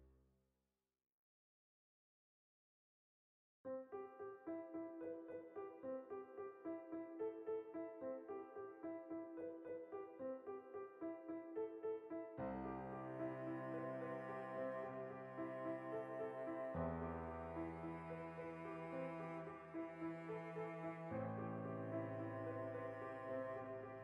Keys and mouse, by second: 0.1 ctrl+z, 4.3 ctrl+r, 5.7 right click, 6.1 ctrl+r, 6.5 right click, 6.8 click, 7.1-10.0 ctrl+middle drag, 7.5 ctrl+b, 10.0 click, 10.1 ctrl+z, 10.6 ctrl+z, 11.2 ctrl+r, 12.7 alt+right click, 13.2 g, 13.9 shift+click, 14.0 alt+right click, 14.4 g, 15.1 shift+click, 15.3 right click, 15.8 middle click, 16.3 right click, 16.7 f, 17.3 shift+middle click, 18.1 right click, 18.5 f, 18.9-20.4 middle drag, 20.4 right click, 20.6 ctrl+middle click, 21.1 shift+right click, 21.3 middle click, 21.6 shift+right click, 22.2-23.6 middle drag, 22.8 g, 23.6 shift+click, 23.8 middle click.